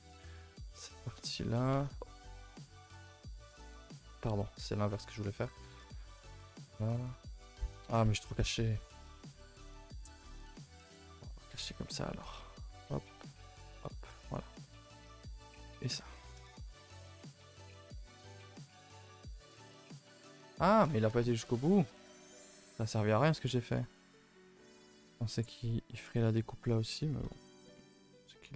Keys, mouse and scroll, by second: 0.1-1.7 middle drag, 1.7 ctrl+i, 1.8 h, 2.5 middle click, 2.9 ctrl+z, 3.2 middle click, 3.4 ctrl+z, 4.9 ctrl+i, 5.1 h, 5.8 middle click, 5.9 middle click, 6.2 middle click, 6.7 scroll up 4, 7.0 a, 7.2 middle click, 7.6 a, 7.7 a, 8.0 ctrl+z, 8.2 ctrl+z, 9.0 middle click, 9.8-10.3 scroll down 3, 10.0 a, 10.3 middle click, 10.7 scroll down 2, 11.0 shift+middle click, 11.5 alt+click, 12.7 h, 13.3 l, 13.6 h, 13.9 middle click, 14.3-14.6 scroll up 2, 14.6 middle click, 16.2 middle click, 16.3 scroll up 2, 16.5 shift+middle click, 16.7 a, 16.9 a, 17.2 middle click, 18.4 middle click, 18.6 ctrl+z, 18.9 ctrl+z, 19.4 middle click, 19.7 middle click, 20.3 middle click, 20.5 a, 20.7 a, 20.9 shift+middle click, 21.2 1, 21.4 middle click, 22.3 middle click, 22.5 middle click, 24.9-27.8 middle drag, 27.8 middle click.